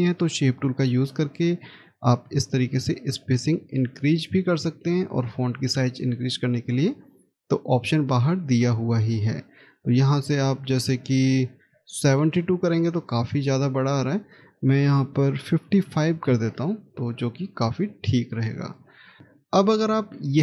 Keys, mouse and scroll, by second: 0.7 scroll up 1, 15.5 5, 16.1 Return, 18.9 scroll down 1, 19.2 middle click.